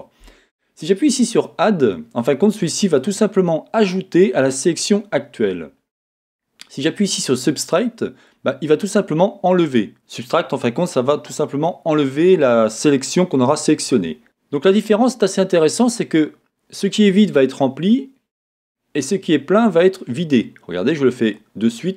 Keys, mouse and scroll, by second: 1.3 click, 3.0 click, 6.8 click, 8.2-21.4 drag.